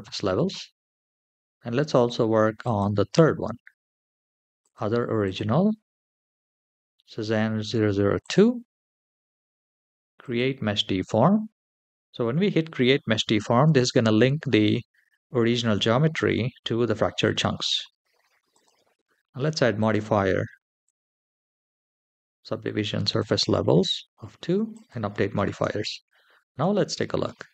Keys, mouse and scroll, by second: 0.9-1.9 scroll up 1, 2.7-3.9 drag, 4.4 click, 5.0-8.2 drag, 10.0 click, 11.9-13.2 scroll down 3, 18.3-20.9 drag, 21.5-22.9 scroll down 2, 22.9 click, 22.9 scroll down 1, 24.5 click, 25.6-26.4 shift+middle drag, 27.1 space.